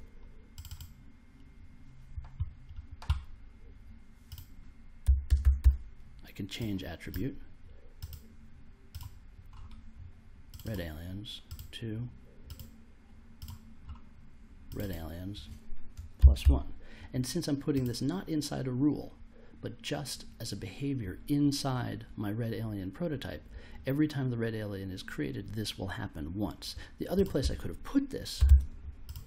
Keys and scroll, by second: 4.8-6.0 typing, 15.9-16.9 typing, 28.4 super+x.